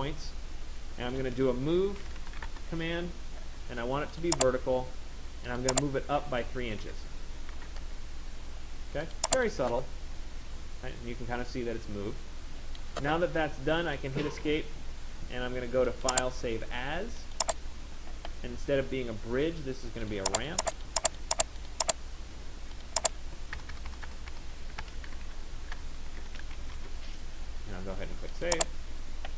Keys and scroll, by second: 2.2 Return, 7.6 Return, 14.0 Escape, 23.3 BackSpace.